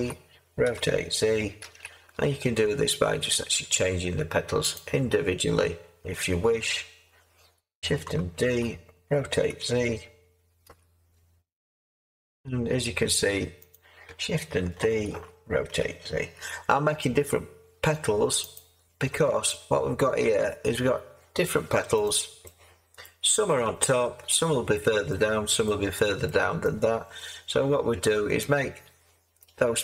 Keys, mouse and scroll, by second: 0.6 r, 1.6 z, 8.4 d, 8.4 z, 9.5 r, 10.6 z, 15.1-16.3 typing.